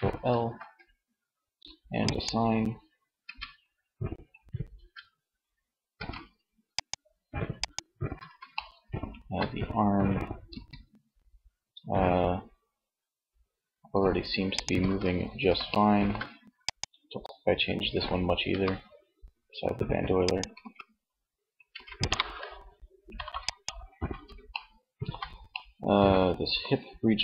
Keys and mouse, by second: 1.4-2.7 drag, 2.3 Tab, 4.1 Tab, 5.2 ctrl+s, 10.0 r, 13.9 click, 14.2 ctrl+z, 15.1 click, 16.0-17.1 middle drag, 17.7 r, 19.7 click, 20.0 ctrl+z, 20.7 ctrl+s, 23.6 middle click.